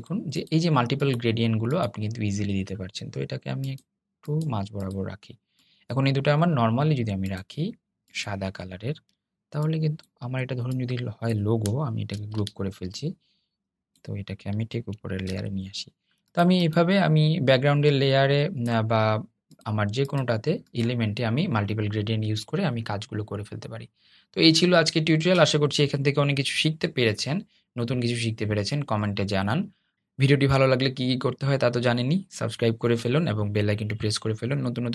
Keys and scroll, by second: 11.2 super+g, 14.3 super+}.